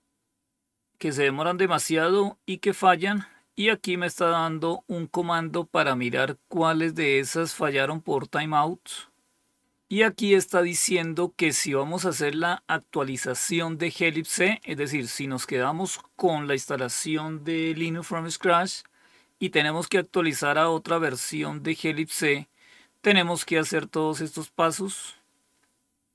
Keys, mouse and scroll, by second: 2.4 click, 3.8 scroll down 1, 8.9-9.6 scroll down 1, 9.6-10.1 scroll up 2, 10.2-11.1 scroll up 2, 20.4-21.4 scroll up 2, 25.4-26.1 scroll up 3.